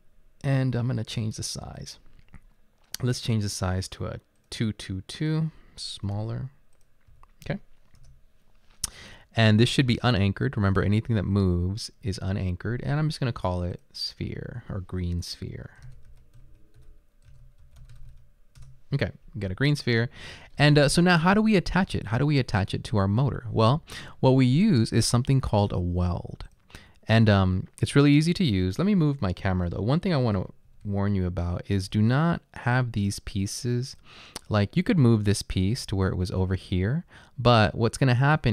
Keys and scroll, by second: 6.2-7.1 typing, 8.0 Return, 15.7-18.6 typing, 22.7-23.4 typing, 30.6-32.5 typing, 36.5-37.5 typing.